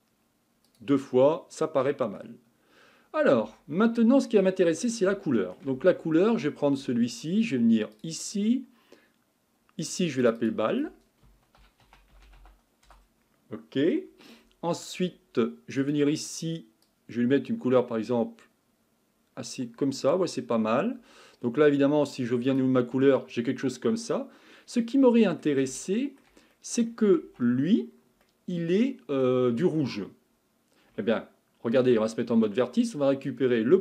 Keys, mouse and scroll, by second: 0.6-1.3 drag, 1.3-3.0 middle drag, 3.0-3.4 scroll up 3, 3.4 Tab, 4.0-4.7 middle drag, 4.7-5.2 scroll down 3, 5.2 shift+middle click, 5.8 Tab, 6.7 Tab, 7.9 click, 10.2 click, 10.4-12.2 drag, 12.2 l, 15.8 click, 22.5 click, 23.1-27.2 middle drag, 27.2 Tab, 27.6-28.3 scroll up 3, 28.3-31.8 middle drag, 31.8 1, 32.9 click, 33.5-33.8 scroll down 2.